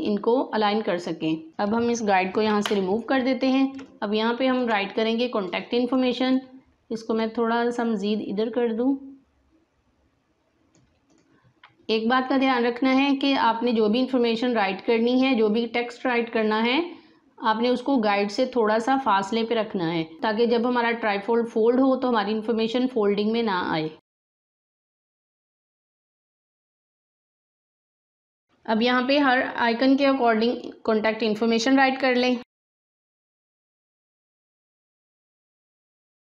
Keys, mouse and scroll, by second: 1.5 click, 2.4 Delete, 3.7 space, 3.9 click, 4.2 space, 5.9-11.7 drag, 23.3 alt+Num_Lock, 23.5 alt+scroll down 1, 24.5 click, 32.2-36.2 typing, 35.3 shift+click, 36.1 alt+scroll up 1.